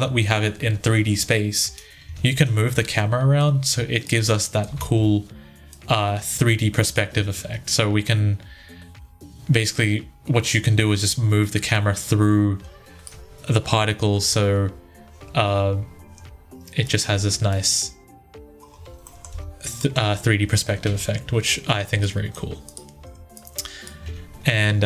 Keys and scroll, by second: 1.9 Tab, 4.6 ctrl+z, 14.1 1, 19.1 Tab.